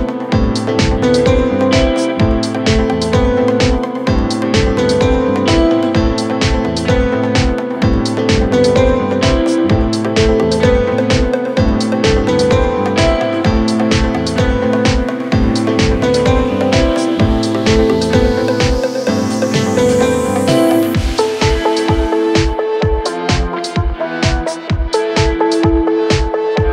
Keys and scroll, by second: 3.2 F3, 10.2 F3, 12.7 shift+F2, 13.0 Escape, 19.0 Delete, 20.9 F3.